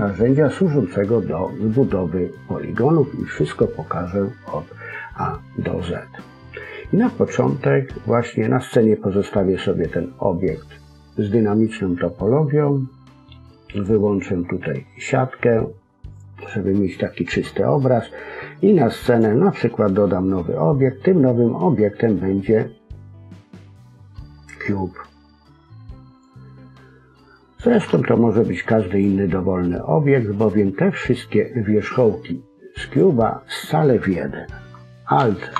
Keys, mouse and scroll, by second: 13.7 click, 19.0 click, 27.6 Tab, 29.8-30.6 scroll down 2, 30.1 middle click, 32.8 click, 35.1 alt+m.